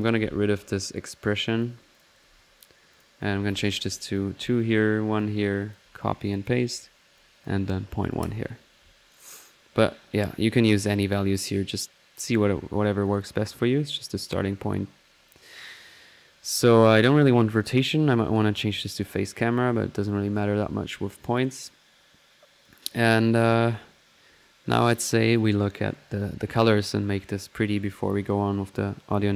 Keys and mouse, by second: 0.7-2.0 drag, 2.9 click, 4.6-5.2 drag, 6.3 drag, 13.0 click, 17.6 click, 18.3 click, 21.4 click, 22.6 click, 25.9 middle click.